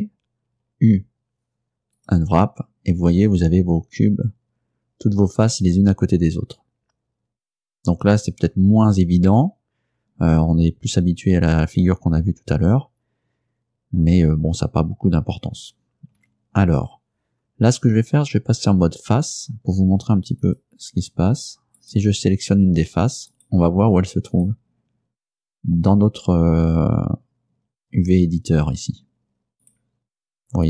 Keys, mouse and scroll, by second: 0.9 u, 2.0 click, 16.3 a, 20.5 click, 21.9 right click, 23.4 right click, 24.4 right click, 29.7 right click.